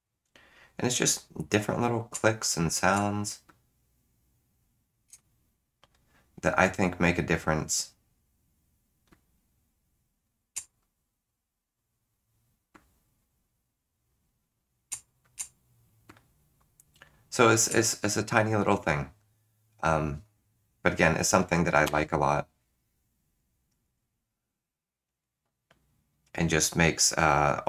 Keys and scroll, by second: 5.1 2.